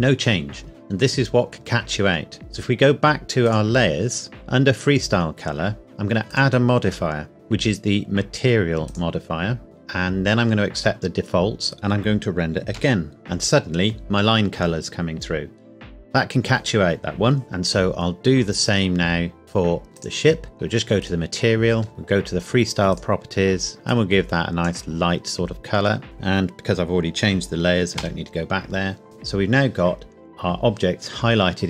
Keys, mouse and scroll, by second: 3.4 click, 6.2 click, 8.8 click, 12.7 F12, 19.4 click, 19.8 Escape, 20.0 click, 21.8 scroll down 1, 22.8 click, 28.0 F12.